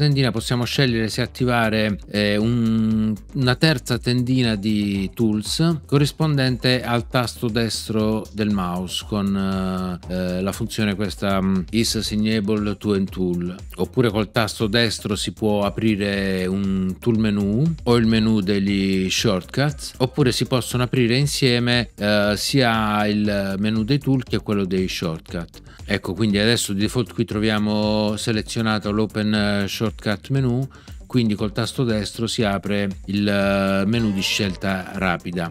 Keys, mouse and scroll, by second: 33.9 right click.